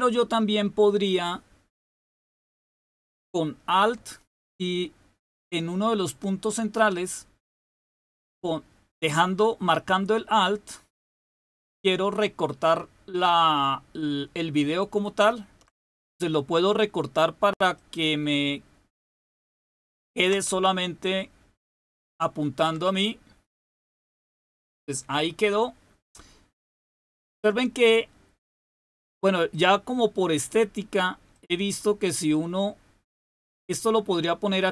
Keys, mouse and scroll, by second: 6.8-15.3 alt+drag, 17.7-20.1 alt+drag, 21.1-22.6 alt+drag, 29.4 click, 31.2-33.1 drag, 33.4-34.7 drag.